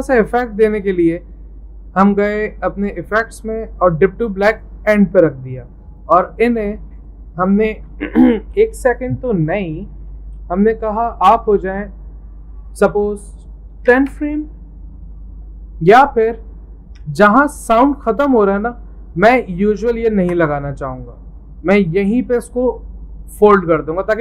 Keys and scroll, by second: 8.8 Left, 8.9 Left, 9.3 Left, 9.5 0, 9.8 Right, 10.4 Right, 11.2 Left, 11.4 Left, 13.5-14.6 typing, 20.2 ctrl+x.